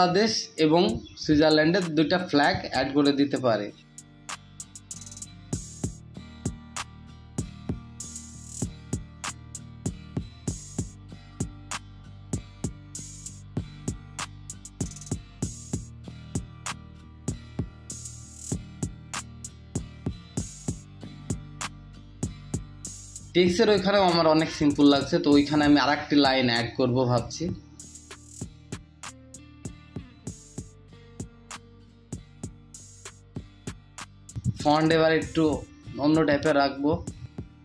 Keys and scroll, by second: 1.1 ctrl+v, 17.5 ctrl+t, 17.9 space, 18.1 space, 18.2 space, 20.6 ctrl+t, 28.5 ctrl+v, 32.4 Return, 32.9 ctrl+t.